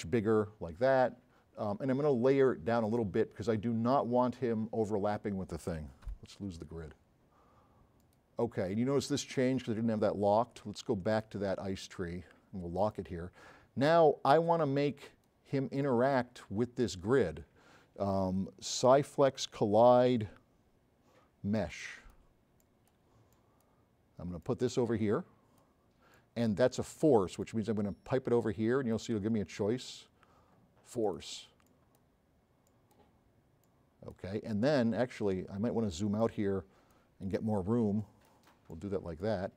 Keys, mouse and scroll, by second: 2.9 click, 3.9-5.3 drag, 6.2 g, 8.0 click, 14.8 click, 21.8 click, 22.6-23.0 drag, 23.4 click, 24.4 click, 31.0 click, 31.7 drag, 32.0 click, 32.7 drag, 33.7-34.1 drag, 34.9 scroll down 4, 36.2 click.